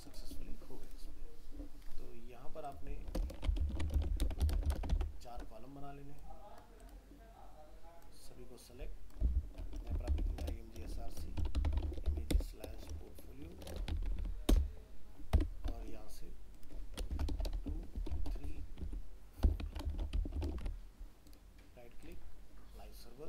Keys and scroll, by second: 4.0 ctrl+c, 4.3 ctrl+Return, 4.4 ctrl+v, 4.8 ctrl+Return, 4.9 ctrl+v, 20.4 ctrl+s.